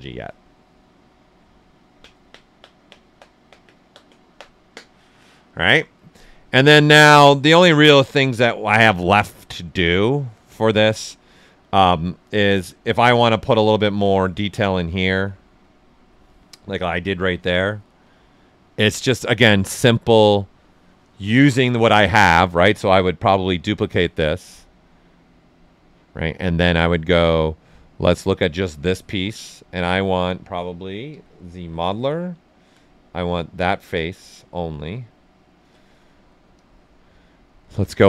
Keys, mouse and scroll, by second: 6.7 right click, 6.8 right click, 7.5-12.1 alt+right drag, 12.9 alt+click, 13.7 shift+f, 14.2-19.5 ctrl+right drag, 19.5-23.3 drag, 25.5 click, 28.2 click, 30.8-32.0 typing, 32.5-34.4 alt+drag, 36.5-38.0 drag.